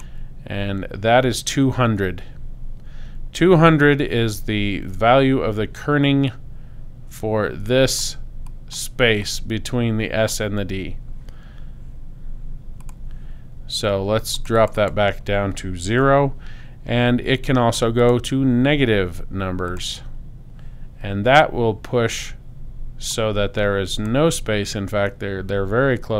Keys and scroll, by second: 15.9 0.